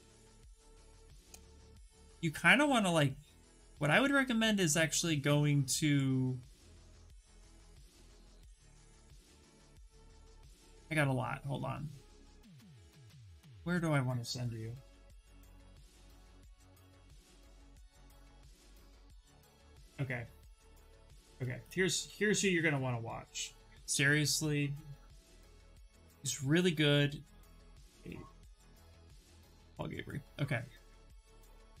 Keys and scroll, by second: 0.0-0.4 typing, 0.9 Return, 14.4-16.5 typing, 18.0 BackSpace, 20.1 m, 21.2-24.8 typing, 26.8 a, 28.1 b, 28.5 o.